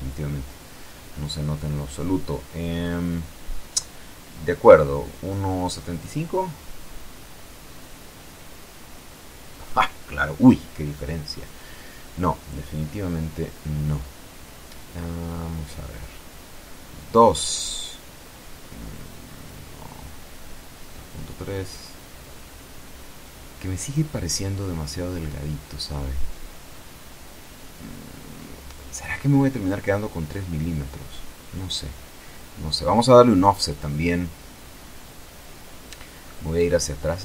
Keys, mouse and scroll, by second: 1.7 click, 3.0 Home, 3.8 Delete, 4.4 KP_7, 5.2 Left, 5.7 KP_Decimal, 5.9 KP_Enter, 7.0 F12, 10.7 Escape, 12.2 click, 13.7 Home, 14.3 Delete, 15.7 KP_Enter, 17.9 click, 19.1 Home, 19.6 Right, 20.2 KP_Decimal, 20.8 KP_3, 21.2 KP_Enter, 23.7 click, 24.8 click, 26.1 BackSpace, 26.8 KP_5, 26.9 KP_Enter, 29.5 click, 31.0 click, 31.4 click, 32.8 click, 34.1 KP_0, 34.8 KP_Enter.